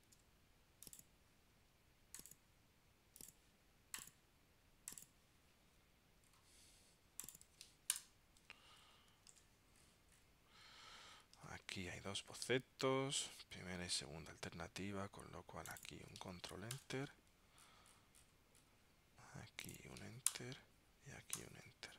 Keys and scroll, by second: 0.2 super+v, 9.4 super+Tab, 11.5 super+Tab, 13.3 super+Tab, 16.9 super+Return, 17.8 super+Return.